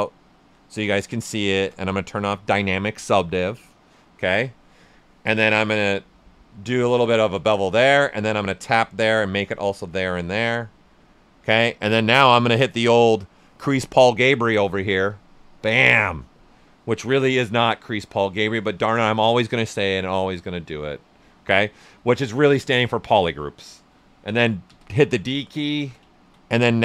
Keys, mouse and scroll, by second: 1.4 shift+d, 4.1 typing, 5.6-8.4 drag, 5.6 typing, 8.9-12.5 right drag, 12.5-15.1 drag, 24.6 d, 25.7 shift+f, 26.1 ctrl+right click.